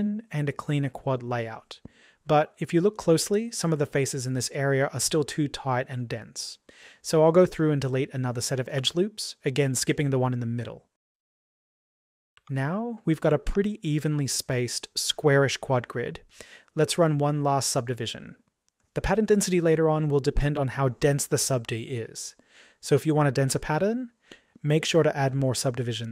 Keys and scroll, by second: 8.7 Delete.